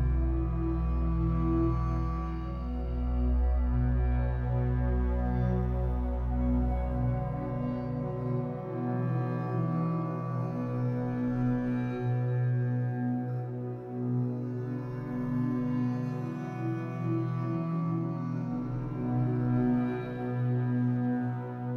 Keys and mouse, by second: 0.0 click, 0.9 alt+click, 1.5 ctrl+alt+click, 2.6 click, 3.7-5.5 alt+drag, 6.3 click, 7.0 click, 9.8-11.2 drag, 14.4 click, 18.6 click.